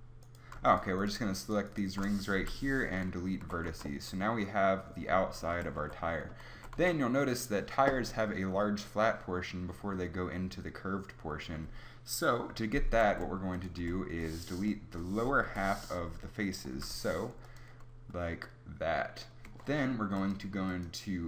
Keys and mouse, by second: 2.4 Delete, 3.4 Tab, 3.7 z, 5.5 KP_3, 5.8 Tab, 6.2 a, 6.6 a, 6.8 z, 13.1 ctrl+Tab, 13.6 ctrl+Tab, 13.8 b, 14.7 b, 15.5 b, 16.7 Delete, 19.5 Tab.